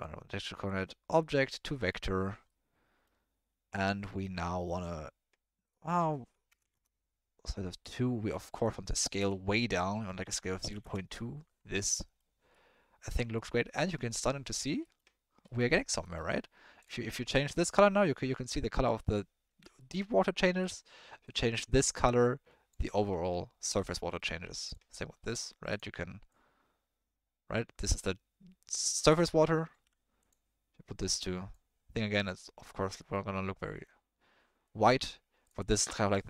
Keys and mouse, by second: 0.7-1.5 drag, 1.8 middle click, 2.5-3.1 middle drag, 5.8 click, 7.8 middle click, 8.8-10.8 drag, 11.8-12.2 middle drag, 12.5 middle click, 13.3-13.8 middle drag, 14.9 middle click, 15.6 middle click, 16.0 middle click, 19.5 ctrl+z, 19.8 middle click, 20.6 drag, 23.6 ctrl+z, 24.1 middle click, 24.6 click, 29.8 ctrl+z, 32.2-32.6 middle drag, 33.0 middle drag, 33.7 middle click.